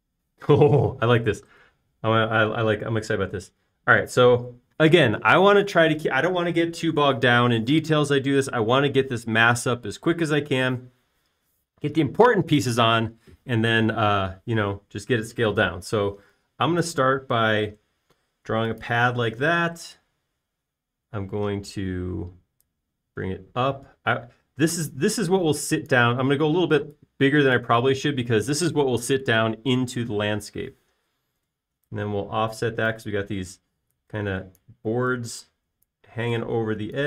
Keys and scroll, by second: 17.9 r, 20.3-21.1 typing, 33.0 f, 34.5-35.2 typing.